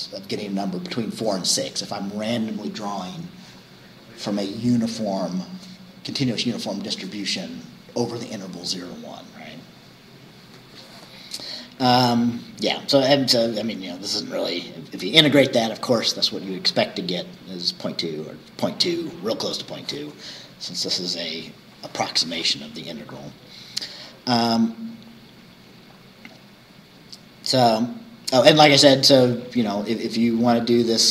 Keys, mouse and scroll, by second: 13.3 scroll down 2, 23.2-23.6 scroll down 2, 24.6-25.1 scroll down 2, 28.3 scroll down 2, 28.6-29.4 scroll up 2, 29.4-29.8 scroll up 1.